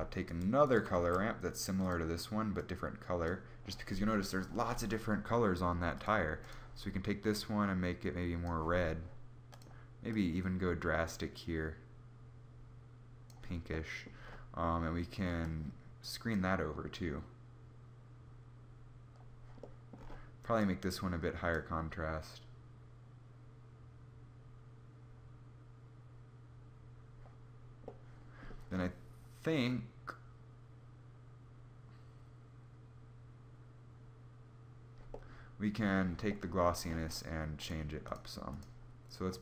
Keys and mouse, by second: 0.9 shift+d, 5.7 click, 9.1 click, 13.3-15.1 middle drag, 27.7-32.0 middle drag, 37.4-39.4 drag.